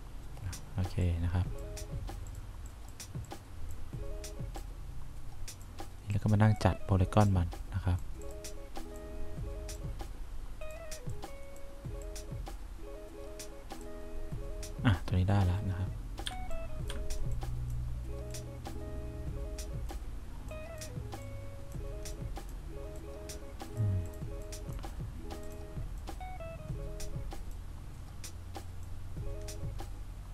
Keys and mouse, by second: 11.4 click, 16.6 1, 17.7 click, 18.7 click, 21.6 click, 22.5 click, 23.3 click, 29.3-30.3 drag.